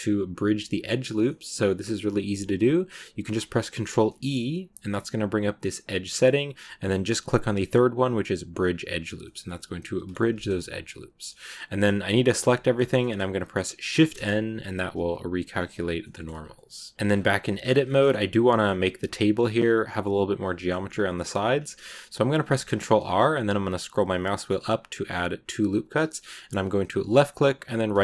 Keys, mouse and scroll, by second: 1.1 middle click, 1.6-4.0 scroll up 1, 4.0 ctrl+e, 9.0 scroll down 1, 9.1-12.1 middle drag, 12.1 a, 12.6 scroll up 1, 12.7-13.8 shift+middle drag, 13.8 shift+n, 15.4 scroll down 1, 15.6 a, 15.9 middle click, 16.2 Tab, 16.3 scroll up 1, 16.4 middle click, 16.9 scroll up 2, 17.7 shift+middle click, 18.1-18.5 scroll down 1, 18.5 scroll up 2, 20.5 shift+middle click, 21.4-22.3 scroll up 1, 22.3 ctrl+r.